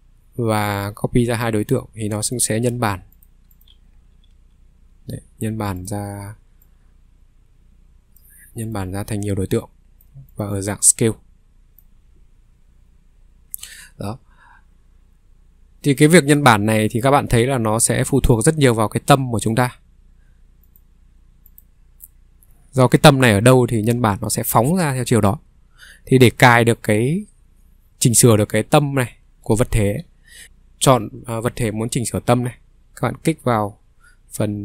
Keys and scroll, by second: 4.3 w, 30.4 Escape.